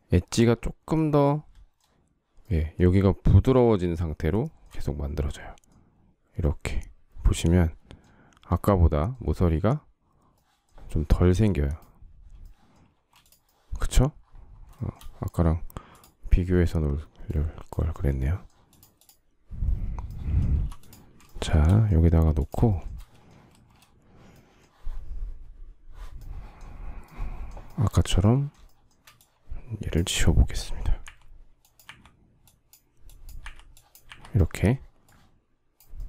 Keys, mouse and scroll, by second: 4.1 shift+middle click, 12.6 space, 14.6 shift+middle click, 20.2 m, 20.9 shift+middle click, 22.3 shift+middle click, 22.5 shift+double middle click, 23.1 space, 28.3 shift+middle click, 30.7 Delete, 33.1 Delete.